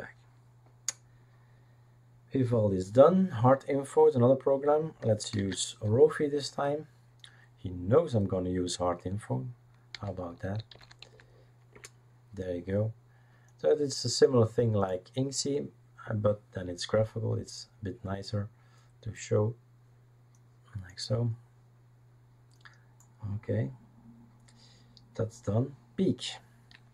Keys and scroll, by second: 5.3 ctrl+space, 9.7-11.5 typing, 11.7 Return.